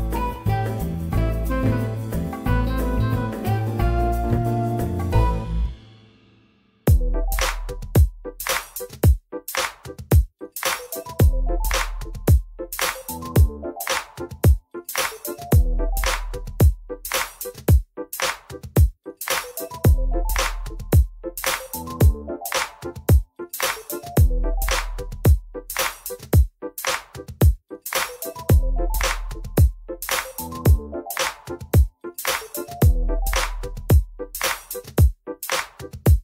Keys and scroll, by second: 1.7 F4, 4.0 F4, 6.5 z, 6.8 F4, 7.4 alt+x, 12.2 w, 13.3 ctrl+alt+e, 22.5 F3, 24.3 F3, 25.6 F3, 28.4 ctrl+shift+c, 29.0 alt+x, 32.8 F4, 34.7 F4, 35.6 F4.